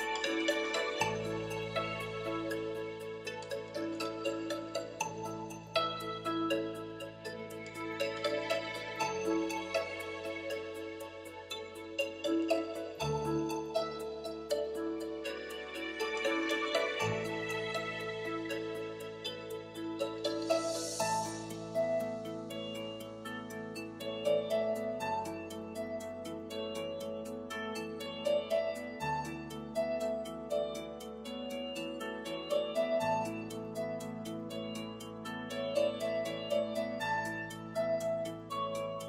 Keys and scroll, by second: 10.5 super+s, 15.3 3, 35.8 BackSpace.